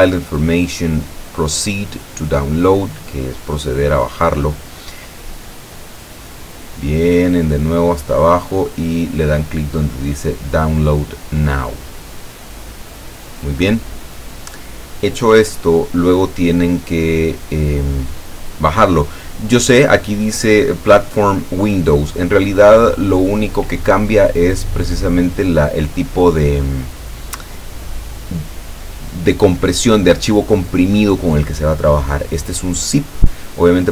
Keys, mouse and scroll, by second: 3.5 click, 5.8-8.7 drag, 21.5 click, 23.0 click, 23.5 click, 25.1 click, 32.3 click.